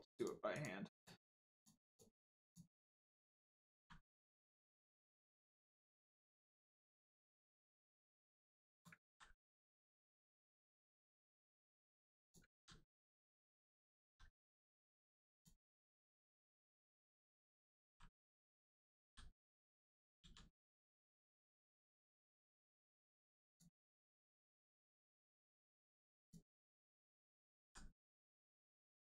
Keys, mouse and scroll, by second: 0.1 shift+click, 0.5 shift+click, 3.7 c, 4.2 click, 9.0 ctrl+z, 9.9 middle click, 11.2 click, 12.5 ctrl+z, 13.3 right click, 13.9 ctrl+z, 15.2 click, 15.9-16.2 scroll up 1, 16.5 shift+middle click, 16.9 scroll up 1, 17.8 c, 19.0 f, 23.1 click, 23.9 right click, 24.7 click, 27.6 f, 28.9 ctrl+z.